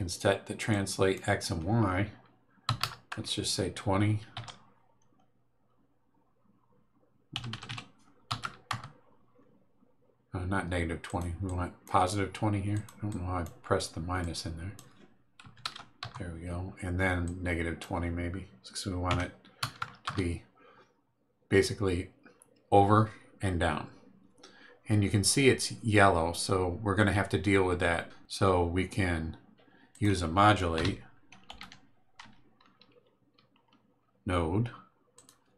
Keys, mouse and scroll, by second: 0.7 click, 2.7 KP_2, 2.8 KP_0, 4.3 Num_Lock, 7.3 Delete, 8.3 KP_2, 8.4 KP_0, 8.7 KP_Enter, 11.0 click, 11.4 click, 12.7 click, 13.1 click, 14.2 click, 15.4 KP_2, 15.7 KP_0, 16.0 KP_Enter, 17.2 click, 19.1 KP_Subtract, 19.6 KP_2, 19.8 KP_0, 20.0 KP_Enter, 29.9 click, 30.7 Tab, 31.2-32.2 typing, 35.1 click.